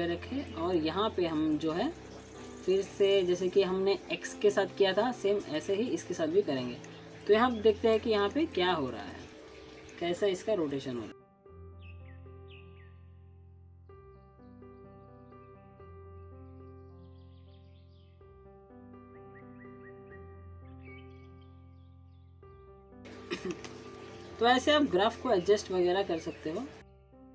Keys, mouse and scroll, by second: 0.4 click, 1.5 alt+middle click, 1.9 alt+scroll down 1, 2.5-3.0 scroll up 1, 3.0 click, 3.0 click, 4.5-7.6 middle drag, 7.9 click, 8.2 scroll down 2, 8.8-9.4 alt+middle click, 9.7 click, 11.1 click, 11.3 alt+middle click, 11.7 click, 14.9-15.2 alt+click, 16.2-16.6 click, 16.7 middle click, 17.0 w, 17.3-17.9 drag, 20.8-21.5 drag, 22.6 drag, 25.8-26.2 scroll up 1, 26.3 alt+middle click, 26.6 alt+scroll up 1, 26.8 alt+middle click, 26.9 click.